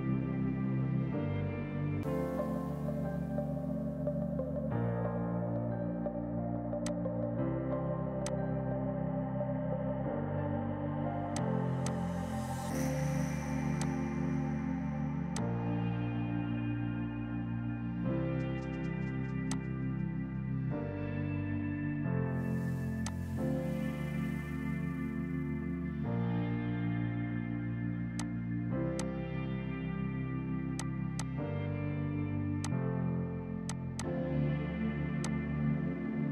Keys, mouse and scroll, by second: 0.1 Delete, 0.6 space, 1.2 F2, 1.8 space, 4.3 space, 4.7 F3, 5.6 F4, 6.6 F2, 6.9 click, 8.3 shift+click, 11.4 click, 11.8 F2, 11.9 click, 13.8 click, 19.6 click, 22.4 space, 23.0 F2, 23.1 click, 23.3 right click, 27.4 click, 28.6 space, 29.0 click, 30.0 k, 30.8 click, 32.3 k, 32.7 click.